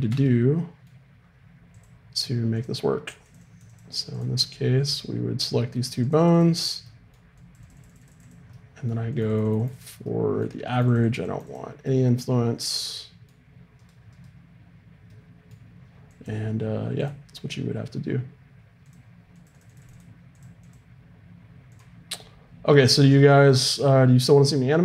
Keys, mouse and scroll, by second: 1.7-6.0 drag, 6.1-13.2 drag, 13.2 middle click, 13.8-15.1 right drag, 15.1-18.8 middle drag, 16.1-18.8 drag, 19.4-24.8 drag.